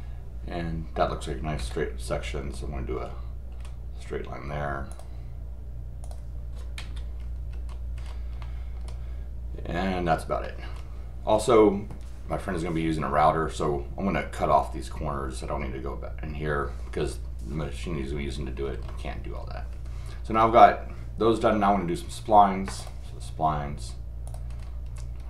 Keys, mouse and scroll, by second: 2.9-3.5 scroll up 2, 3.5 scroll down 2, 4.9 click, 6.0 click, 7.2 scroll down 1, 7.5-8.4 scroll up 3, 8.4 middle click, 10.4 middle click, 18.7 scroll up 1, 19.2 scroll down 4, 20.5 scroll up 2, 21.3 scroll down 1, 22.8 click, 24.3 click, 24.5 scroll up 1, 24.9-25.2 scroll down 1.